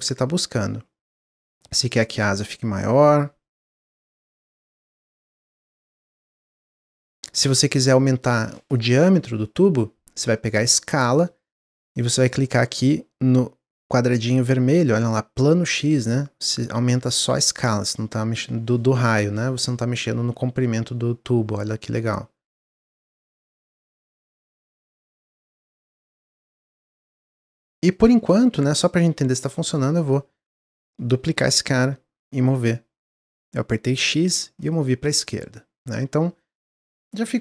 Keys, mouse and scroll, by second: 0.4-2.0 middle drag, 2.0 click, 3.1-4.6 middle drag, 4.6 click, 4.9-6.6 middle drag, 6.6 click, 7.0 scroll up 1, 7.0-7.8 middle drag, 7.8 click, 8.1-11.1 middle drag, 11.2-11.8 scroll up 2, 11.9-15.4 shift+middle drag, 15.4-18.3 drag, 24.9-25.2 scroll down 3, 25.2-25.7 middle drag, 25.7 scroll down 1, 26.2-26.8 drag, 26.8-31.2 middle drag, 31.2 shift+d, 35.0 drag, 35.4-37.4 middle drag.